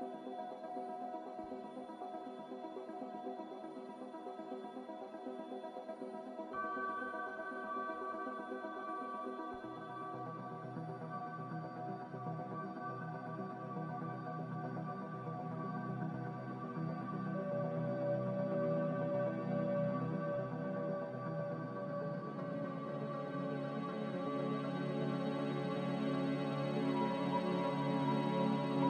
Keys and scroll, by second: 1.1 a, 11.7 z, 16.8 ctrl+z, 23.9 z, 25.1 z.